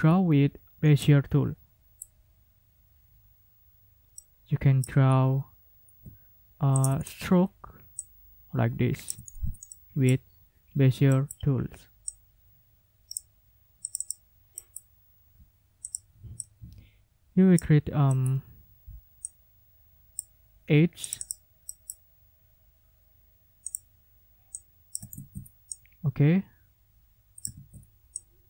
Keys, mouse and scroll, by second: 1.0-2.2 middle drag, 4.1 middle click, 5.1-5.4 ctrl+scroll up 2, 9.1 ctrl+middle click, 9.4 ctrl+scroll down 2, 9.7 ctrl+middle click, 11.1 click, 12.1-13.3 drag, 13.8 click, 14.6 click, 15.8 click, 16.4-17.7 drag, 18.1 click, 19.2-20.3 drag, 21.0 click, 21.6 click, 23.7 click, 24.5 click, 25.7 ctrl+z, 25.7-27.6 ctrl+drag, 27.5 ctrl+z, 28.2-28.4 ctrl+drag.